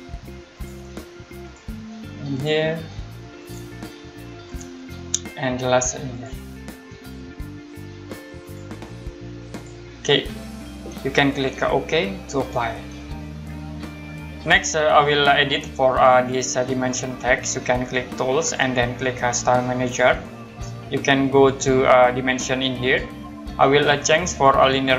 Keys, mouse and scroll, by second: 6.1 click, 8.4 click, 12.1 click, 18.4 click, 21.4 click, 24.3 click.